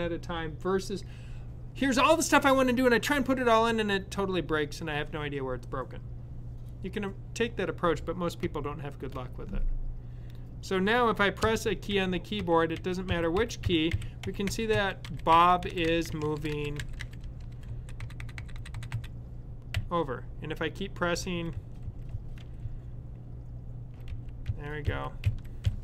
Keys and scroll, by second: 11.6-20.7 typing.